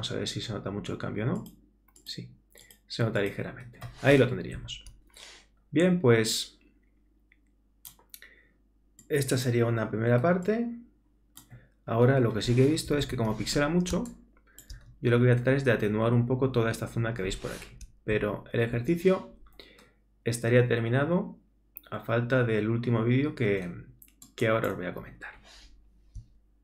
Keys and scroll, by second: 4.6 super+-, 13.1 super++, 13.9 super+space, 18.1 super+-.